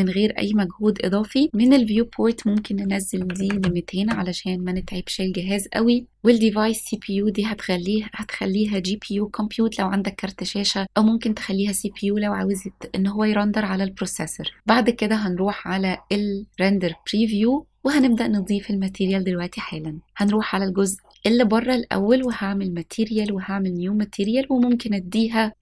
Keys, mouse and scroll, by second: 1.7-4.0 drag, 3.6 KP_0, 6.9-8.8 drag, 16.6 click, 17.9 click, 20.0 middle click, 20.0 scroll up 1, 20.2 click, 21.1 click, 22.3 click, 23.2 click, 24.2 click.